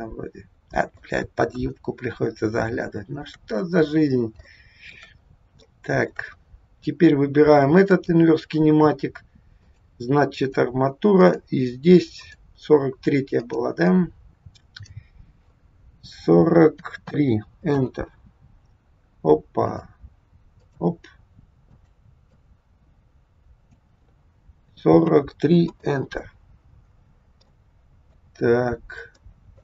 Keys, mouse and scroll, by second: 1.5 KP_1, 2.1-2.5 scroll down 4, 2.9 shift+middle click, 3.5 middle click, 4.5 shift+middle click, 5.3 scroll up 2, 5.6 shift+middle click, 7.9 click, 9.6 click, 11.1 click, 13.4 click, 19.6 click, 21.8 click, 26.8-27.5 scroll down 4, 27.5 middle click, 29.1 shift+middle click.